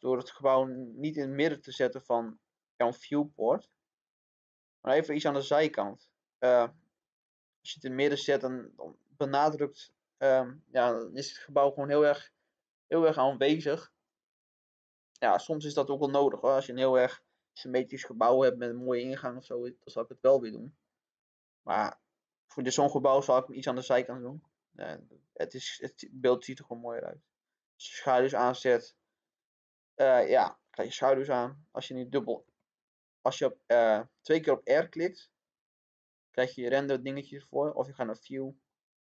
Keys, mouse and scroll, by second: 1.7-2.8 middle drag, 3.1-6.6 drag, 7.0-7.3 scroll up 1, 7.8 scroll down 1, 8.1-24.8 middle drag, 26.1-36.8 drag.